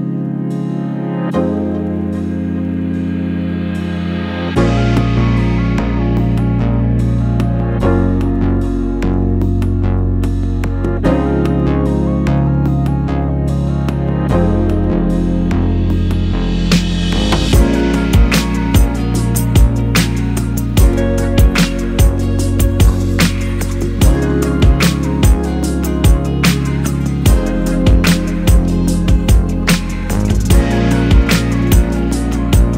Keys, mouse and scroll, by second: 0.4 scroll up 1, 0.8-4.9 middle drag, 1.5 scroll up 1, 3.3-4.3 scroll up 2, 4.3-9.9 drag, 4.3 z, 8.6-9.1 scroll up 2, 9.1-9.8 scroll up 1, 10.2-12.6 shift+middle drag, 10.9 scroll down 2, 12.6-23.4 drag, 14.1 KP_Enter, 20.7-21.7 scroll down 1, 21.7 KP_0, 25.8-30.5 drag, 30.5-32.7 middle drag, 31.3-31.7 scroll up 1.